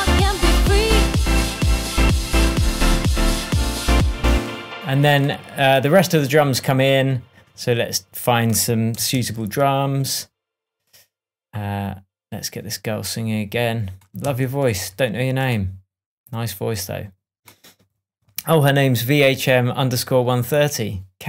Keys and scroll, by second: 3.8 BackSpace, 4.2 space, 9.1 super+d, 14.2 super+d.